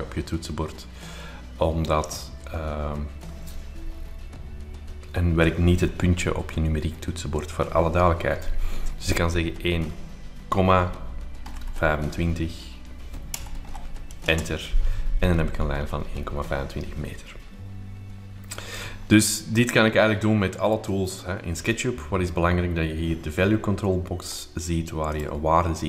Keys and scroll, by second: 11.2-12.2 typing, 13.3 BackSpace, 13.7 5, 14.3 Return, 18.7 Escape, 21.4 r, 21.5 r.